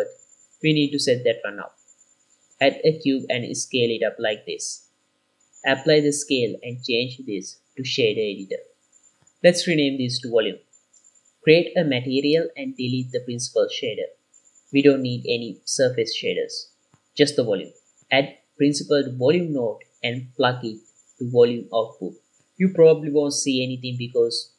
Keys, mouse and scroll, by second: 0.6 ctrl+s, 2.4 middle click, 2.4 scroll down 2, 2.5 shift+a, 3.5-3.9 scroll down 4, 3.7-5.7 typing, 4.5 click, 5.0 click, 5.6 click, 6.0 ctrl+a, 7.8 click, 9.0 n, 9.3 F2, 12.6 click, 14.0-14.4 scroll up 2, 14.3 middle click, 14.8-15.4 scroll up 2, 15.3 click, 16.2 x, 17.0 shift+a, 21.6-22.2 drag, 22.8 click, 23.8 click.